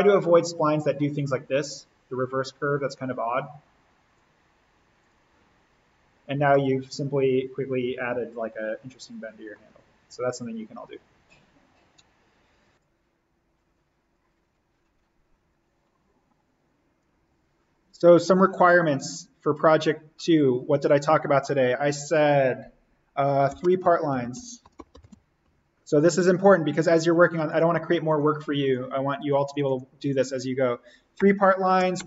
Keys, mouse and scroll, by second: 5.8 click, 6.3 scroll up 1, 6.5-12.6 middle drag, 12.8 ctrl+click, 14.5 ctrl+space, 14.6 ctrl+click, 15.0 ctrl+space, 15.4 ctrl+alt+click, 17.3 ctrl+v, 18.2-23.4 drag, 23.3-25.9 typing, 26.8 click, 27.4 space, 27.5 ctrl+click, 31.1 Return, 31.7-32.0 typing.